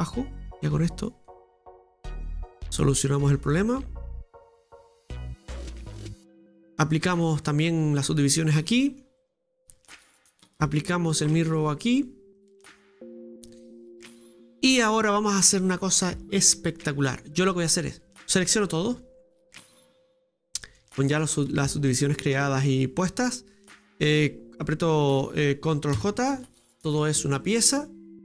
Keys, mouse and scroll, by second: 0.6-4.0 drag, 4.0-4.4 scroll down 1, 4.4 middle click, 4.7 Tab, 5.7-6.1 scroll down 1, 6.1-7.5 middle drag, 7.5 click, 7.9-8.3 scroll down 1, 8.3 middle click, 9.2 right click, 9.9-11.4 middle drag, 11.4-12.4 drag, 12.7-13.2 scroll down 2, 13.2 middle click, 13.3 right click, 16.2 middle click, 18.5 right click, 18.9 shift+right click, 19.7 shift+right click, 20.3 middle click, 21.1 right click, 21.6-26.0 middle drag, 26.0 ctrl+j, 26.8 scroll up 2, 26.9 middle click, 27.4 right click, 27.8 middle click.